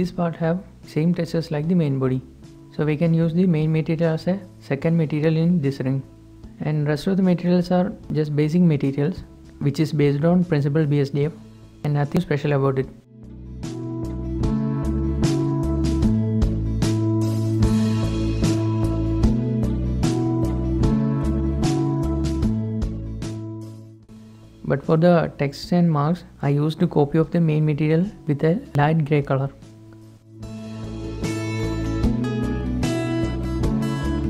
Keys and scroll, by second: 2.6 alt+shift+h, 18.1 typing, 18.2 Return, 25.0 Escape, 25.0 ctrl+z.